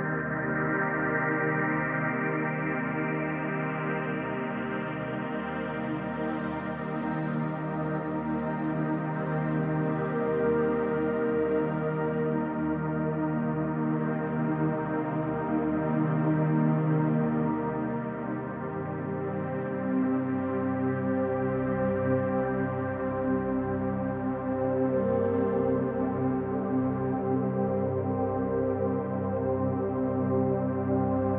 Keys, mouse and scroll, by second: 0.4-0.9 middle drag, 1.5-3.1 drag, 4.5-5.8 middle drag, 6.5 click, 6.9-7.7 middle drag, 6.9-7.3 scroll up 1, 8.3 s, 12.8 click, 13.1-13.9 scroll down 1, 14.1 alt+z, 14.4-15.1 scroll down 2, 15.1-15.4 scroll up 2, 15.8 scroll up 1, 16.5 alt+z, 18.8 click, 19.2-19.9 middle drag, 20.3 middle click, 22.1 KP_7, 23.4-24.5 drag, 25.1 s, 27.0 click, 27.6-28.6 middle drag, 29.0-29.3 scroll down 1, 29.3-30.4 middle drag.